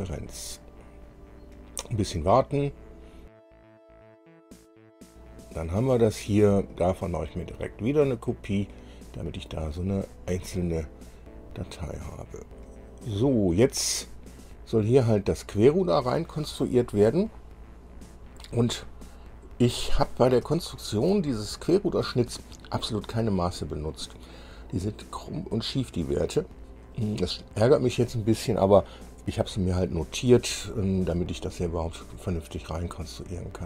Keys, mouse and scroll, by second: 0.0 click, 3.9 click, 4.1 space, 4.3 middle click, 5.1 click, 6.9 click, 9.9 click, 10.5 scroll down 2, 11.3 click, 13.7-14.3 scroll up 4, 14.6-15.8 drag, 17.7-18.7 drag, 19.5 click, 20.7 shift+click, 21.5 shift+click, 27.1-28.3 drag.